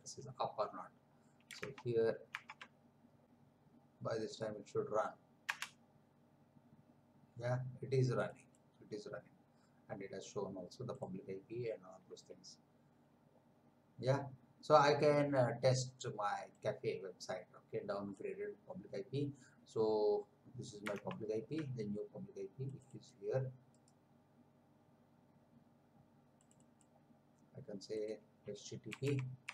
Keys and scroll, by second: 1.7 alt+Tab, 3.2 Return, 5.4 Return, 21.0 alt+Tab, 28.7-29.5 typing.